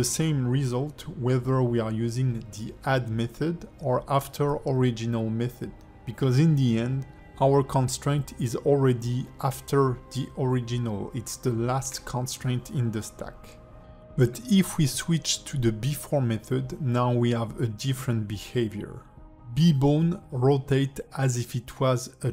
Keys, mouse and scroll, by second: 6.6 click, 8.1 click, 8.5 r, 13.2 click, 14.5 click, 16.8 click, 17.5 r.